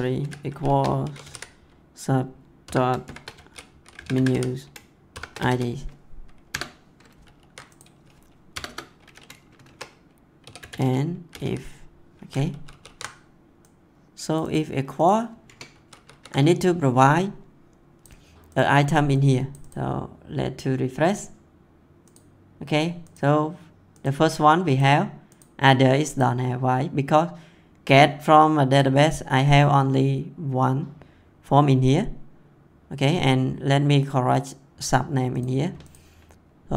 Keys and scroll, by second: 0.6 shift+4, 1.0 s, 2.6-5.9 typing, 6.5 Return, 7.2 ctrl+s, 8.5 Return, 9.6 shift+2, 10.4 e, 11.3 i, 12.6 ctrl+s, 15.4 Return, 15.7 ctrl+s.